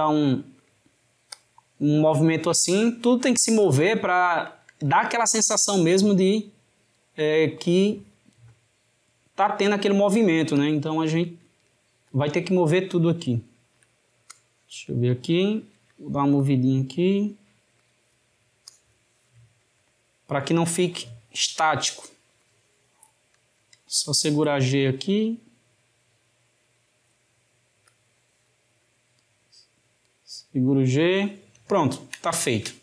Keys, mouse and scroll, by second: 1.4 click, 3.9 click, 7.5 click, 13.4 shift+middle click, 14.4 click, 18.7 click, 22.4 click, 27.9 click, 31.8-32.8 ctrl+middle drag.